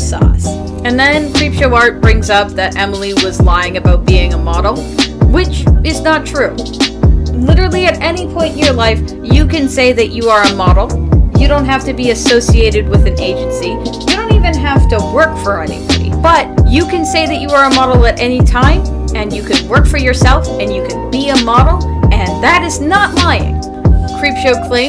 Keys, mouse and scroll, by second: 0.2 ctrl+z, 4.3 ctrl+z, 18.5 space, 19.0 space.